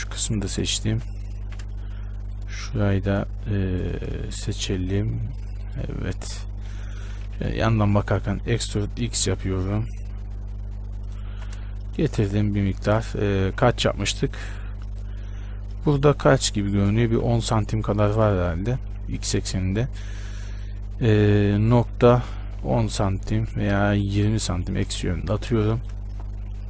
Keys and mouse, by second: 0.7 right click, 1.1 z, 1.7 z, 2.5-4.3 middle drag, 6.7 middle click, 7.4 KP_1, 8.6 e, 11.5 z, 13.6 ctrl+z, 17.3 g, 18.5 e, 25.4 z.